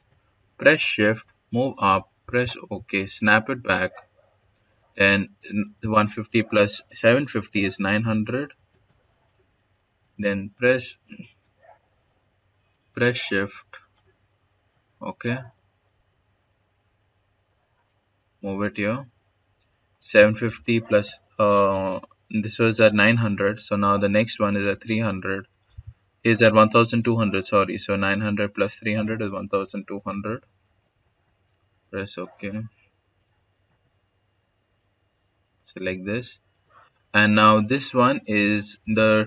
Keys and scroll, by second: 1.4-3.8 typing, 7.3-9.7 typing, 15.7 s, 28.6-30.8 typing, 33.5-34.4 typing.